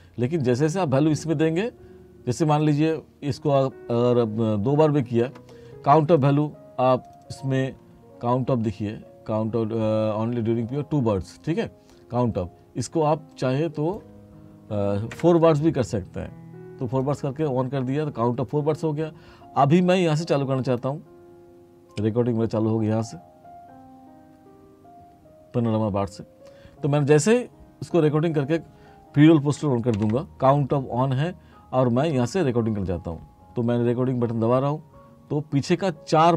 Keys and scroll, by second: 15.2 4, 30.0 ctrl+k.